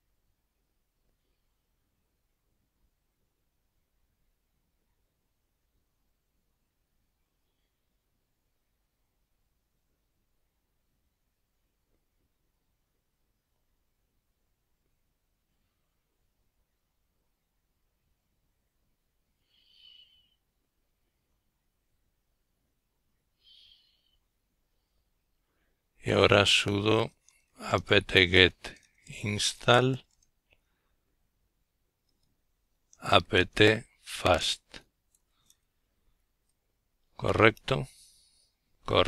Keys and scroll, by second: 22.1-26.8 typing, 28.7-32.2 typing, 35.6 Return.